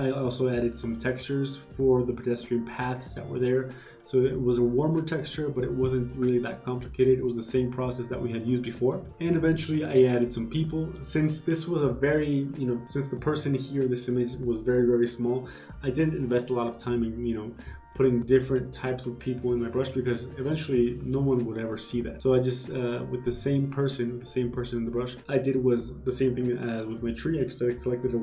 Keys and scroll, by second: 3.0 g, 3.1 ctrl+z, 3.3 ctrl+d, 8.9 Return, 10.1 b, 25.2 ctrl+z.